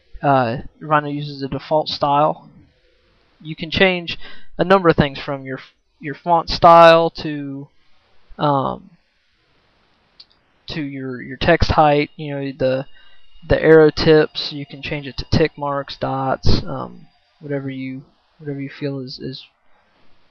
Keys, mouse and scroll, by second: 4.9-5.7 right drag, 5.9-10.9 right drag.